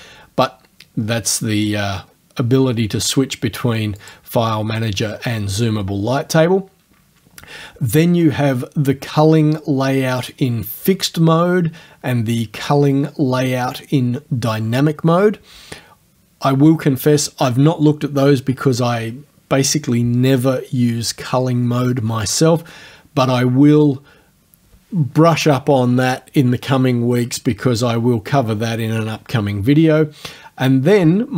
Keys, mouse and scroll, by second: 0.9-1.3 scroll down 2, 1.8 scroll up 2, 2.1 scroll down 2, 4.0 click, 5.5 click.